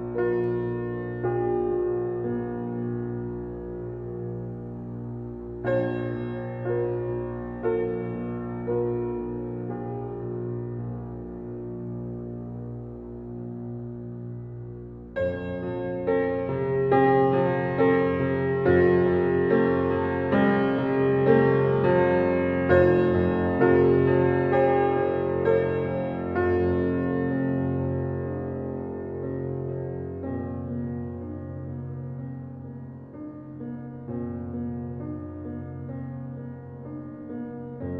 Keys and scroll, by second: 11.1 ctrl+i, 18.3 ], 33.0 ctrl+t.